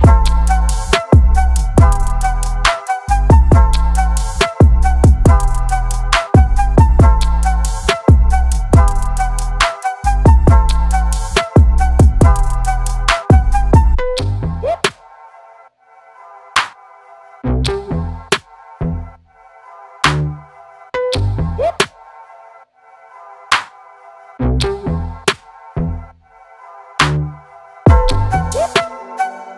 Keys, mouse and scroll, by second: 8.2 click, 9.2 i, 11.0 click, 11.5 v, 12.6 click, 15.1 i, 17.9 v, 19.1 click, 21.8 Down.